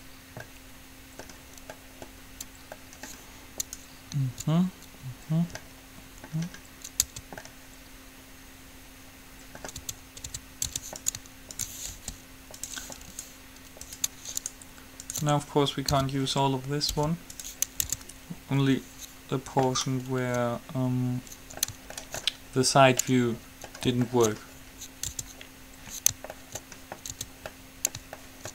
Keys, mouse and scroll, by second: 3.0-5.4 middle drag, 3.8-5.8 right drag, 5.8-7.3 middle drag, 7.3 Tab, 9.9 Tab, 10.5 Tab, 10.8 Tab, 11.3-14.3 right drag, 12.0 g, 16.3 p, 17.2 u, 18.3 Tab, 19.8-21.6 middle drag, 22.3-25.3 middle drag, 25.3 Tab, 26.6 middle click, 27.3 Tab.